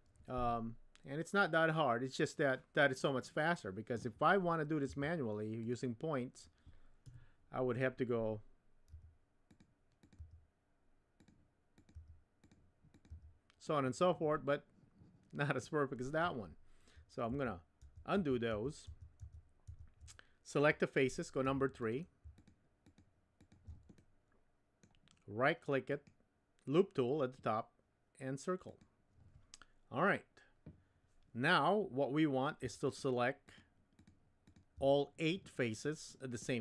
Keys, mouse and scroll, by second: 4.9 1, 5.6 click, 7.0 KP_1, 8.9 g, 10.0 click, 10.6 g, 11.8 click, 12.4 g, 12.9 click, 13.6 g, 17.3 super+z, 17.8 super+z, 18.1 super+z, 18.5 super+z, 18.9 super+z, 19.2 super+z, 19.7 super+z, 21.4 3, 22.3 shift+click, 23.3 shift+click, 23.9 middle click, 25.9-28.8 right drag, 28.8 typing, 36.5 middle click.